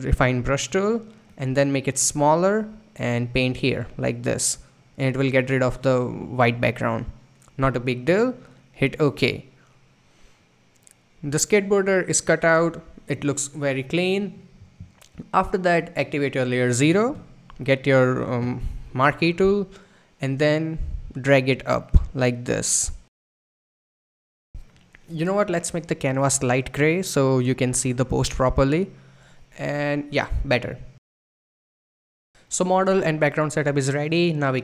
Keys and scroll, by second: 0.0-2.5 typing.